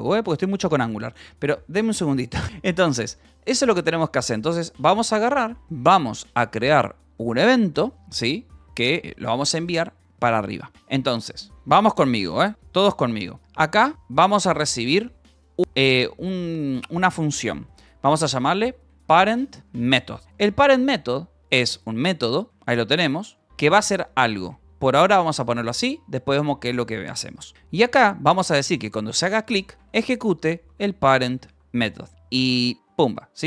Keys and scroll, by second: 2.2 a, 2.6 Right, 2.8 BackSpace, 4.6 Escape, 4.7 k, 5.9 o, 13.4-15.7 typing, 14.2 Escape, 15.5 Escape, 18.3-20.4 typing, 21.8-33.4 typing.